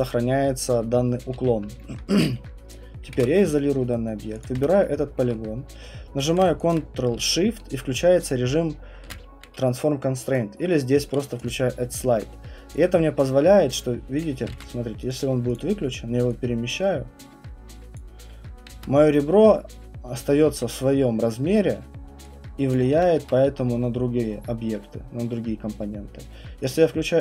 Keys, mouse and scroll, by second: 1.3 q, 1.9 middle click, 2.7 right click, 3.1 ctrl+1, 3.9 right click, 4.4 click, 4.6 w, 5.3 middle click, 6.7 alt+click, 10.4 click, 11.4 click, 12.1 alt+middle click, 14.2 click, 14.5 ctrl+z, 15.1 click, 15.5 click, 17.9 click, 18.7 ctrl+z, 22.7 click, 23.1 ctrl+z, 26.7 click.